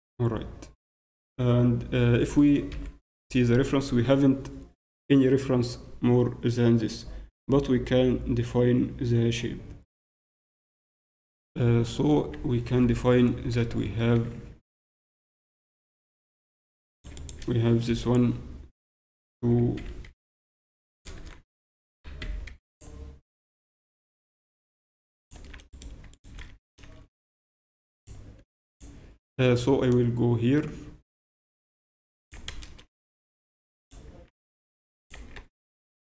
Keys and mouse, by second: 13.8 Tab, 14.1 z, 15.0 z, 16.9-18.9 right drag, 19.5 s, 21.9 s, 23.4-25.2 drag, 25.7 right click, 26.4 z, 26.8 a, 27.5 b, 27.9-29.9 drag, 29.9 b, 32.8 a, 33.4 b, 34.4-36.0 drag, 35.2 z, 35.4 Tab, 35.9 z.